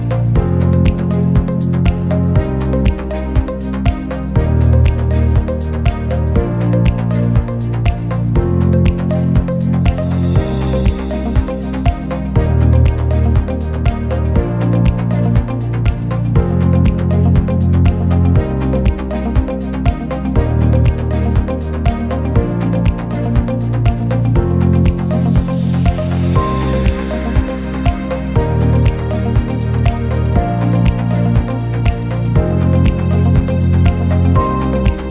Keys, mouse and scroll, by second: 0.2-0.8 middle drag, 0.9-1.4 middle drag, 1.4 shift+d, 2.3 r, 3.2 shift+d, 4.4 x, 5.1 shift+d, 6.3-7.1 middle drag, 7.4 shift+d, 9.7 g, 10.3-11.1 middle drag, 12.0 shift+d, 12.6-13.1 middle drag, 13.1 shift+d, 13.8-14.5 middle drag, 14.5 shift+d, 15.5 r, 17.3 r, 17.8-18.5 middle drag, 18.7 shift+d, 20.4 g, 21.2 r, 22.1 shift+d, 24.3 g, 25.0 r, 25.6 shift+d, 26.7 r, 27.2-27.9 middle drag, 27.9 scroll, 28.1-28.9 middle drag, 29.6 scroll, 29.8 middle click, 30.6 click, 31.3 click, 32.5 n, 32.9 click, 33.4 n, 33.6-35.0 middle drag, 35.0 scroll up 1.